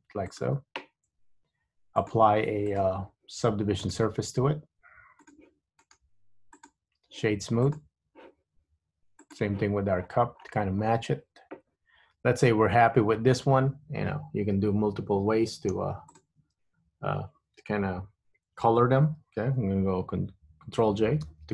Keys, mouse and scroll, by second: 1.2 Tab, 2.2 click, 2.9 click, 5.4 click, 6.0 right click, 7.8 click, 9.4 click, 10.0-10.5 scroll up 2, 10.5-11.2 scroll down 7, 11.2-14.5 scroll down 8, 16.3 shift+click, 21.4 ctrl+j.